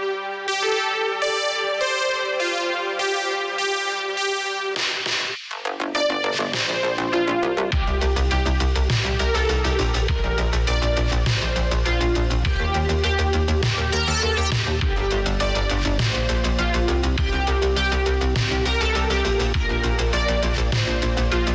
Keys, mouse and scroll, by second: 0.2 space, 4.3 space, 7.1 space, 10.2 space, 12.7 space, 16.5 space, 20.2 space.